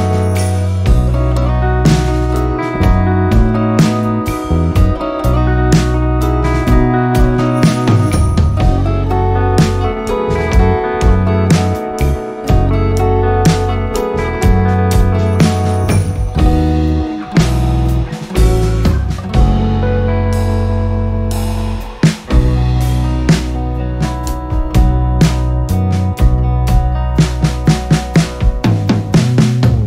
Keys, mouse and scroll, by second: 0.3-5.2 alt+drag, 6.0 r, 6.5-19.0 drag, 20.4 r, 21.1-28.7 drag, 29.0 click.